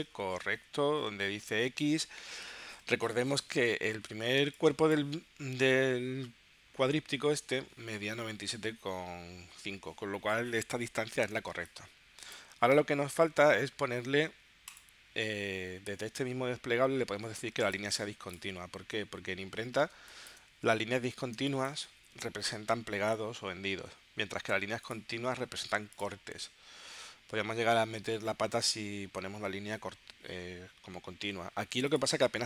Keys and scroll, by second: 4.4 space, 11.5 space, 19.9 space, 21.4 space.